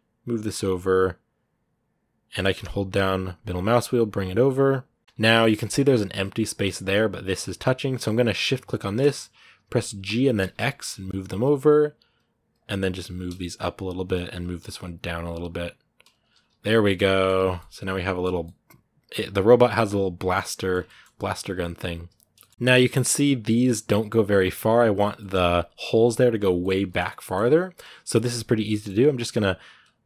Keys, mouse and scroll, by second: 5.0-6.9 scroll up 4, 8.5-9.6 shift+right drag, 9.6 g, 14.2 right click, 14.3 g, 16.1-16.6 scroll down 5, 16.3 z, 16.6 middle click, 17.2 a, 17.2 scroll down 2, 17.4 middle click, 18.2-20.5 middle drag, 20.5 scroll up 1, 20.6 middle click, 21.1-22.2 right drag, 22.2 middle click, 22.5 scroll up 2, 22.7 a, 22.8 middle click, 23.2-24.9 right drag, 24.9 middle click, 25.2-26.2 scroll up 1, 26.2 scroll down 2, 26.4-29.6 shift+middle drag, 29.6-30.0 right drag.